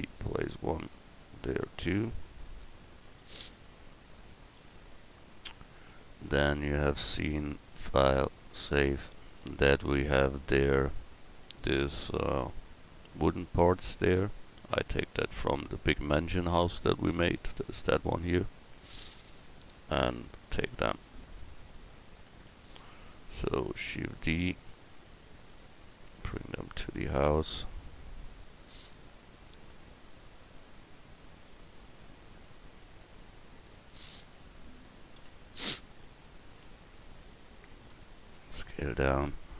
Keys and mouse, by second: 4.6 a, 7.5-9.6 middle drag, 14.6 right click, 16.6-16.9 middle drag, 21.7 KP_1, 23.8 shift+d, 29.0-30.9 middle drag, 35.2 KP_Decimal, 37.9 s.